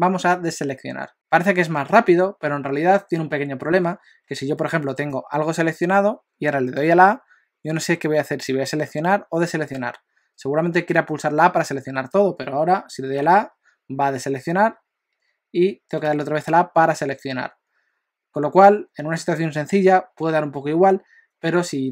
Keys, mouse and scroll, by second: 5.1 click, 13.3 a, 16.1 a.